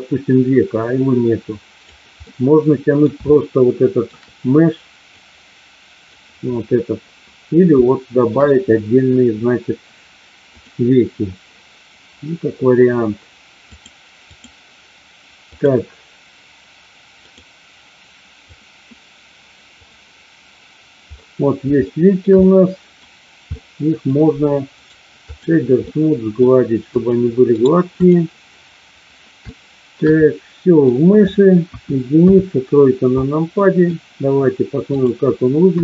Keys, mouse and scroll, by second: 2.2 middle click, 3.3 shift+middle click, 5.2 click, 7.8-8.3 shift+middle drag, 10.4 click, 13.8 click, 15.4 click, 17.3 click, 18.5 click, 21.8-22.9 shift+middle drag, 23.5 middle click, 25.1 right click, 25.8 middle click, 26.9 click, 28.0 right click, 29.4-30.0 shift+middle drag, 30.2-30.8 middle drag, 31.5 KP_1, 32.2 KP_3, 33.5 middle drag, 34.9 drag, 35.7 KP_1.